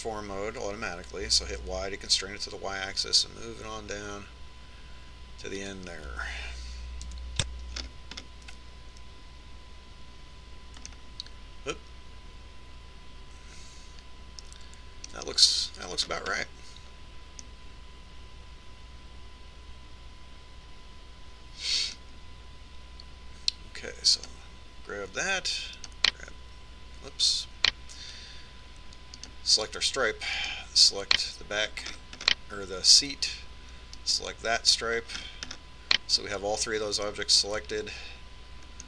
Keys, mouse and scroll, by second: 0.1 shift+d, 8.8 KP_3, 9.4 middle click, 12.6-14.6 middle drag, 17.7-20.9 middle drag, 26.0-29.4 right drag, 31.0-33.8 right drag, 33.7-35.9 middle drag, 35.9 right click, 37.4-38.8 middle drag.